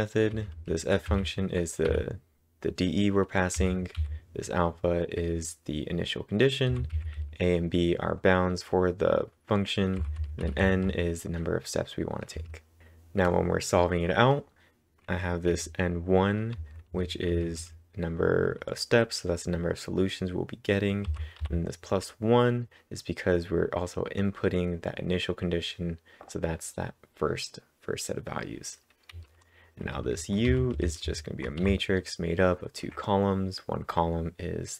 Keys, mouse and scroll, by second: 0.3-1.9 typing, 3.3-4.1 typing, 6.0-6.7 typing, 10.0-11.1 typing, 15.3-16.0 typing, 17.3-18.1 typing, 21.1 typing, 29.1 typing, 30.5-31.6 typing.